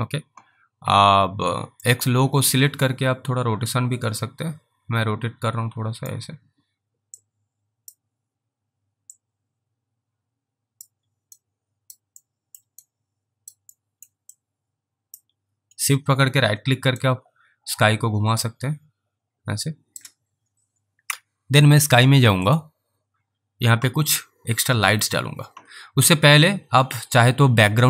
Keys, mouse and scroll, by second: 4.0 click, 7.5 click, 9.4 click, 11.6 alt+right click, 12.5 alt+middle click, 13.2 alt+right click, 14.6 alt+click, 17.3 shift+right click, 22.5 click.